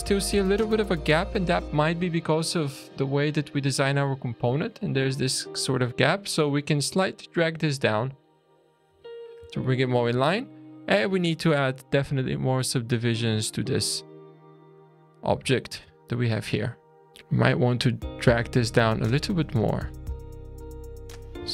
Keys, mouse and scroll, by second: 0.0 click, 0.5 scroll up 2, 1.0-1.5 scroll down 2, 1.6 shift+middle click, 4.7 middle click, 5.3 click, 6.8 click, 8.9 alt+a, 9.1 scroll down 3, 9.5 shift+middle click, 10.2-10.5 scroll up 3, 10.5 click, 12.2 click, 13.9 click, 14.7 click, 14.9-15.3 scroll down 3, 15.3 alt+a, 15.9 shift+middle click, 17.1 click, 17.1 scroll up 2, 18.3 alt+a, 18.6 click, 19.7 click, 21.4 alt+a.